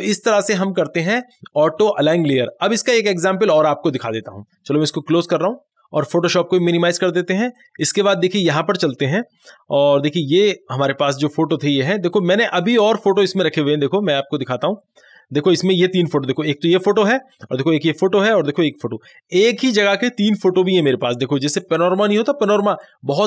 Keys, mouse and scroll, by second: 5.3 click, 6.9 click, 14.5 click, 14.5 click.